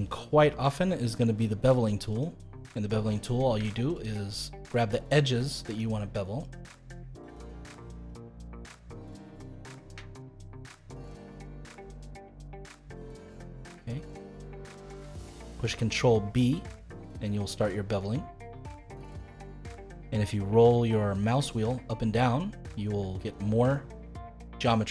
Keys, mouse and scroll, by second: 2.1-3.2 drag, 3.9 shift+click, 4.7 shift+click, 5.6 shift+click, 6.4 shift+click, 7.2 shift+click, 7.9 shift+click, 8.9 shift+click, 9.5-10.6 middle drag, 10.6 shift+click, 11.2-14.2 middle drag, 14.8 ctrl+b.